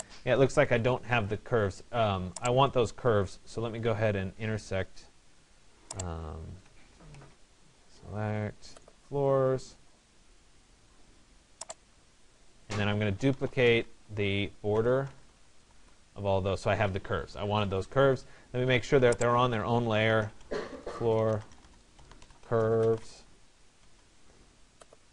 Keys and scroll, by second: 6.8 Escape, 20.4 BackSpace.